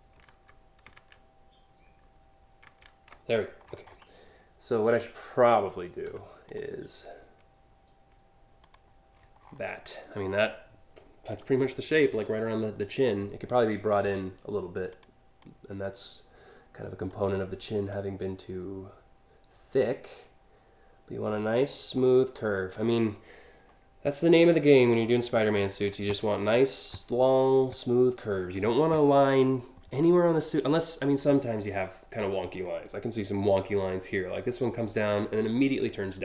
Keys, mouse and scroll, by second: 2.3 ctrl+alt+z, 3.0-3.4 scroll down 2, 3.4 scroll up 1, 4.5 click, 5.6 p, 6.1 click, 8.2 click, 9.0 scroll down 1, 11.7-12.2 scroll up 2, 13.7 a, 14.5 click, 15.0-16.7 drag, 17.6-20.9 drag, 21.2 click, 21.6-22.5 scroll down 6.